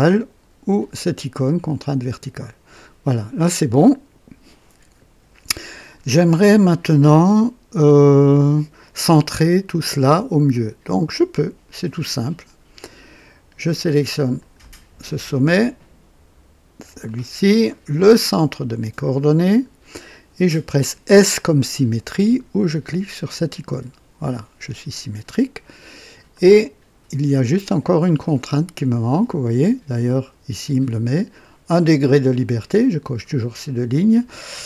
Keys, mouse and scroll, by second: 1.8 v, 14.3 click, 17.0 click, 19.4 click, 23.6 s, 23.9 s, 26.3-29.2 drag, 30.0 click.